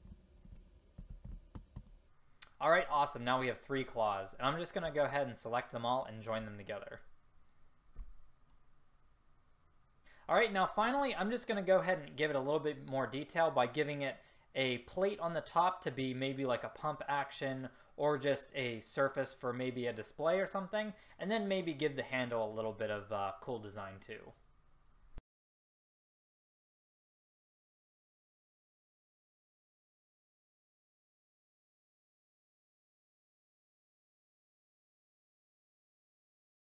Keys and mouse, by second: 0.5 shift+d, 1.7 a, 1.8-4.0 drag, 8.0 a, 25.3-27.5 typing, 27.3 Delete, 29.1-31.8 typing, 30.7 click, 31.3 middle click, 33.1-34.9 typing, 33.7 Delete, 34.5 middle click, 35.2 middle click, 35.9 middle click, 36.5 middle click.